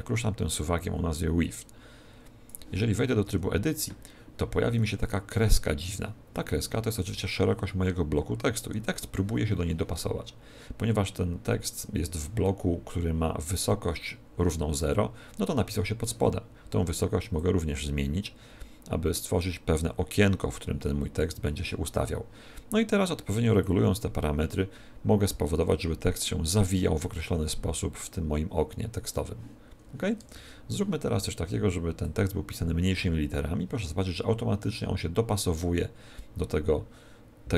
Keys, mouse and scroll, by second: 3.2 Tab, 17.3 click, 23.5 click, 30.1 Tab, 31.9 click.